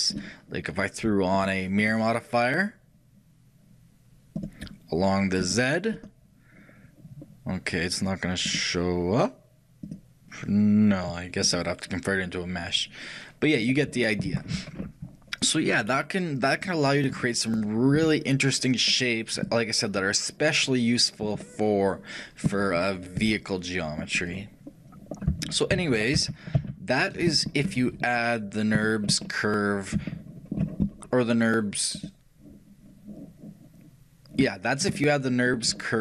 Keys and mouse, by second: 1.4-3.7 drag, 5.5-7.9 drag, 8.5-10.3 drag, 11.5-13.5 drag, 13.7-14.9 drag, 14.9 middle click, 15.1 click, 15.4-16.6 middle drag, 16.6-22.5 drag, 24.9-29.8 middle drag, 25.8 ctrl+z, 32.0-33.7 shift+drag, 35.0-36.0 middle drag.